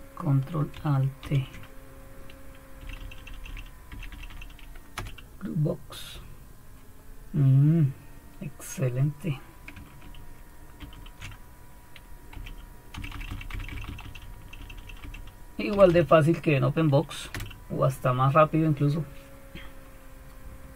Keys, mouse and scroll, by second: 1.2 ctrl+alt+t, 2.8 Down, 3.0 Down, 3.2 Down, 3.9 Down, 4.1 Down, 4.9 Return, 10.8 ctrl+alt+t, 12.3 Up, 12.9 Down, 13.1 Down, 13.2 Down, 13.5 Down, 13.8 Down, 14.0 Down, 14.7 Down, 17.3 Return.